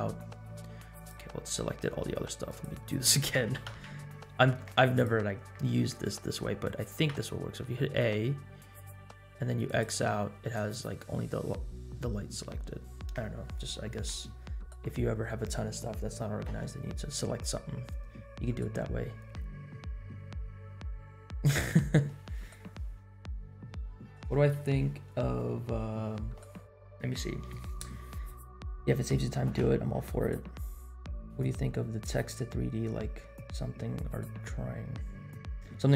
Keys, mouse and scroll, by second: 0.9 click, 2.5-5.0 drag, 9.6 click, 11.2-12.4 scroll down 6, 12.4 scroll up 2.